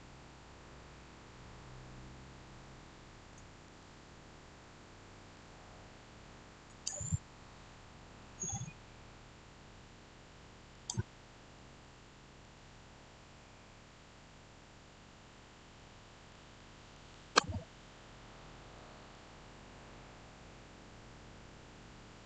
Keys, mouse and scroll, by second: 3.3 click, 3.7-6.6 shift+middle drag, 6.6 click, 10.6 click, 11.7 middle click, 12.6-13.3 scroll down 1, 14.7-15.1 scroll up 1, 16.2-18.9 middle drag, 18.9 shift+scroll down 1, 19.0-22.2 shift+middle drag.